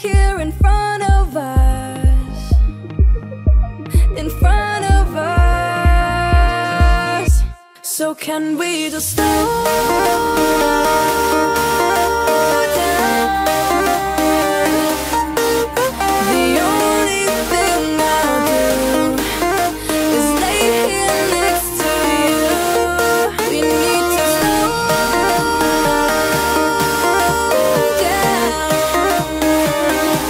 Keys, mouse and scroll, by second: 1.3 click, 3.2 click, 7.1 click, 7.8 ctrl+c, 8.1 space, 8.8 ctrl+z, 8.9 Right, 9.2 space, 9.7 ctrl+v, 10.0 space, 10.4 ctrl+v, 10.6 space, 11.3 ctrl+v, 13.8 shift+space, 17.0 click, 18.5-22.1 alt+shift+drag, 22.1-22.8 alt+scroll down 2, 22.8 ctrl+click, 23.2-23.8 ctrl+scroll down 1, 24.7 alt+scroll up 1, 25.7 m, 27.8 t, 28.8 click, 30.1-30.2 typing.